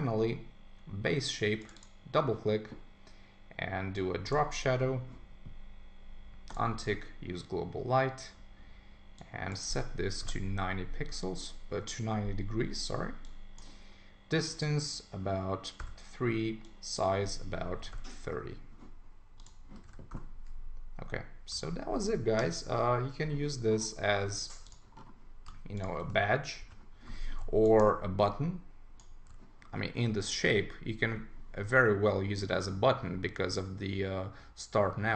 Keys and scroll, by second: 19.8 super+1, 21.6 super+s, 26.6 super+g.